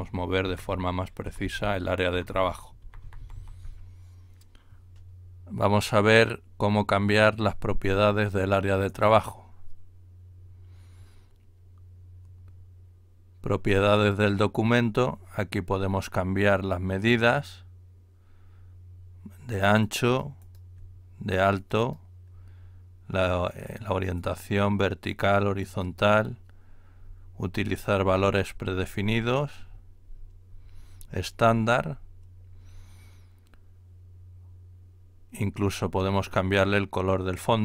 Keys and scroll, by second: 0.0 ctrl+Right, 0.4 ctrl+Up, 0.6 ctrl+Up, 1.2 ctrl+Down, 1.4 ctrl+Down, 1.6 ctrl+Down, 2.0 ctrl+Right, 2.3 ctrl+Right, 2.4 ctrl+Right, 2.8 ctrl+Left, 3.0 ctrl+Left, 3.2 ctrl+Left, 3.4 ctrl+Left.